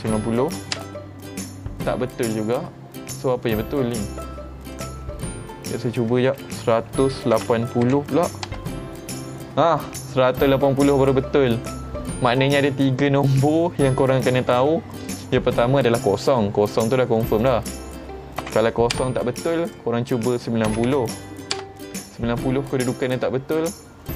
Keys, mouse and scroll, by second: 4.8 click, 13.7-15.1 middle drag, 17.5 click, 19.7 click.